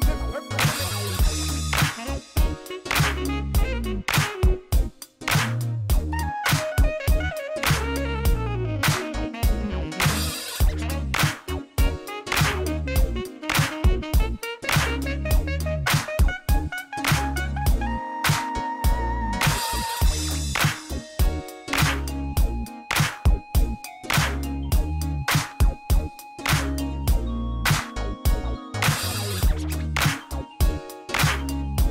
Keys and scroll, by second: 1.6 Tab, 2.0 a, 3.0 Tab, 3.4 alt+a, 14.9 2, 15.2 Return, 26.9 alt+a, 27.3 \.